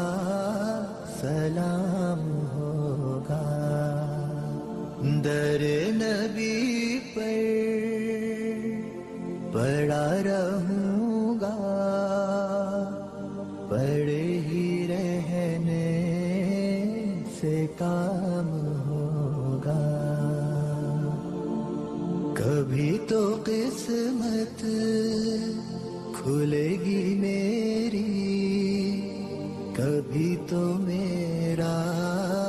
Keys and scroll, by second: 10.9 alt+c, 11.1 alt+w, 11.5 p, 21.5 ctrl+z, 22.7 shift+Page_Down, 23.9 alt+w, 24.2 p.